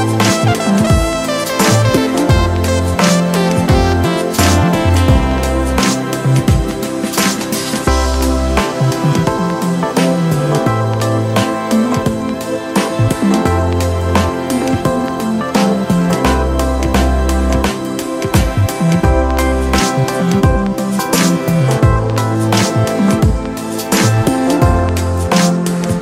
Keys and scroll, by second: 6.2 super+z, 8.8 super+z, 11.9 super+z, 20.9 super+z, 25.7 super+z.